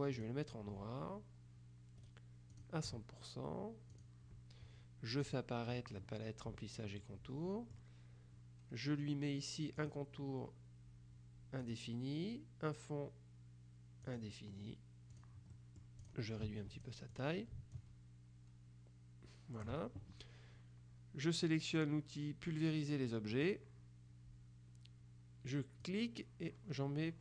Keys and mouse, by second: 0.2 click, 2.1 right click, 4.0 click, 5.3 click, 7.1-8.3 drag, 9.9 click, 11.7 click, 14.2 click, 15.2 click, 15.6 middle click, 16.2 click, 16.9 ctrl+click, 17.9-20.2 drag, 23.4 click, 25.9-27.2 drag.